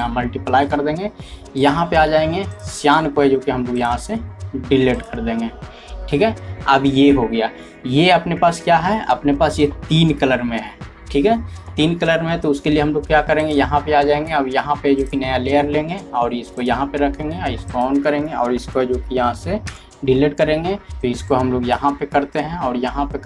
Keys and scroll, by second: 19.6 ctrl+Delete, 20.9 ctrl+z.